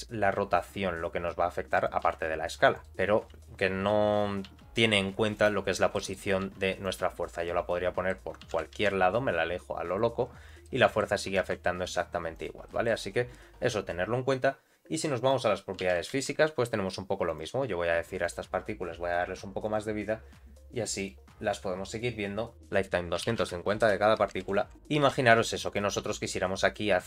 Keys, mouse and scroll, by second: 2.8 middle click, 3.2-3.9 scroll up 2, 3.9-4.4 scroll down 2, 4.4 g, 5.6-5.9 scroll down 2, 5.9 middle click, 6.4 g, 7.1-7.4 scroll down 2, 7.4 middle click, 8.4 g, 10.3 scroll up 2, 10.6 middle click, 11.3 r, 12.6 middle click, 13.1-14.3 scroll up 2, 15.1 click, 15.8 g, 18.2 click, 19.6 click, 20.9 click, 22.5-24.7 drag, 24.4 shift+Left, 25.0 r, 26.0 g, 26.9 middle click.